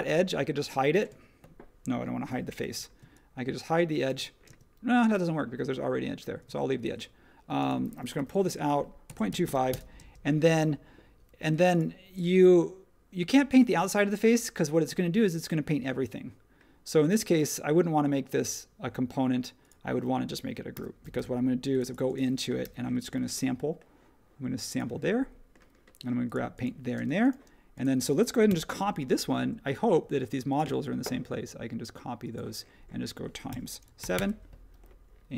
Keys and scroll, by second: 2.6 super+z, 4.4 space, 6.4 super+z, 6.8 super+z, 8.2-9.9 typing, 20.7 super+g, 22.6 b, 26.9 space, 28.5 m, 33.5 x, 34.0 7, 34.1 Return.